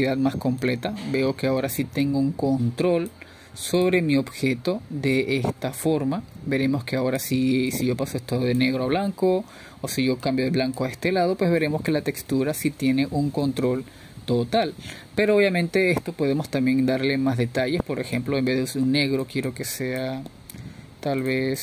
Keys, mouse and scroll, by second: 0.4-3.9 middle drag, 3.9-7.2 drag, 7.5 middle click, 8.5-15.6 drag, 15.6-17.0 middle drag, 17.0-19.3 scroll down 3, 19.3-21.6 scroll down 1.